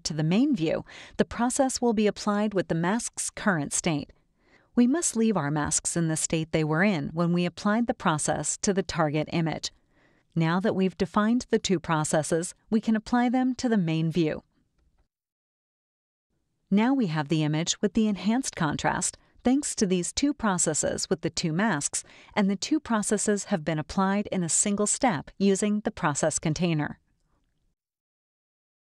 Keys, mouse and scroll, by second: 0.1 click, 3.0 click, 8.0 click, 9.3 click, 13.3-14.7 drag, 18.7 click, 20.6 click, 21.3 right click, 22.4 click, 23.7 click, 24.9 click, 26.1 click, 28.3 click.